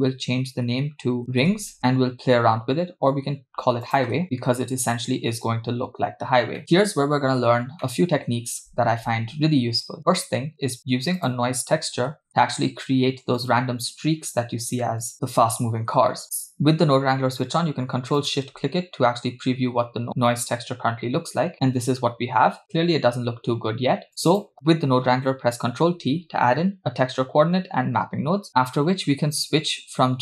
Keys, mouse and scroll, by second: 3.9 click, 6.2-6.6 scroll down 2, 7.8 middle click, 10.8 shift+a, 15.4-16.2 scroll up 2, 16.2 scroll up 1, 16.3 click, 18.4 ctrl+shift+click, 24.1-24.4 drag, 26.0 ctrl+t, 28.6-29.6 scroll up 2, 29.6-30.2 scroll up 1.